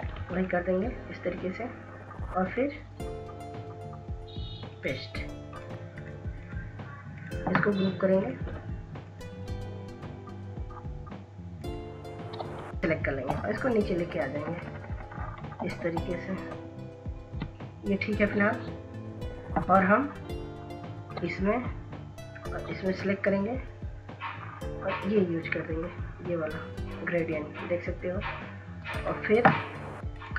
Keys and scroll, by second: 5.2 ctrl+z, 5.8 ctrl+z, 13.2 Down, 13.3 Down, 13.5 Down, 14.0 Down, 14.4 Right, 14.6 Right, 14.8 Right, 14.9 Right, 16.4 Up.